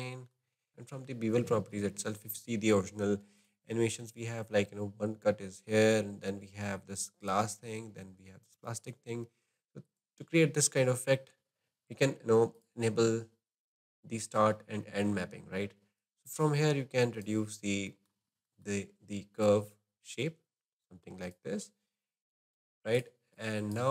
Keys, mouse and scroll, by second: 0.4 scroll down 1, 0.6 scroll up 2, 0.7-1.8 middle drag, 2.0-3.5 shift+middle drag, 12.5 click, 13.0-14.1 scroll down 4, 14.1-16.0 scroll down 1, 16.0-17.5 drag, 17.5-17.9 scroll down 1, 17.9-19.4 shift+middle drag, 19.4-23.4 drag.